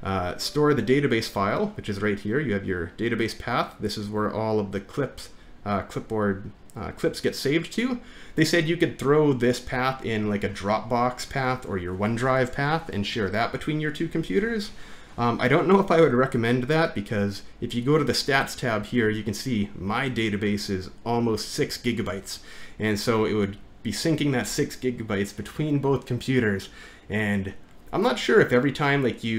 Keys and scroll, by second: 5.1 typing, 17.3 typing.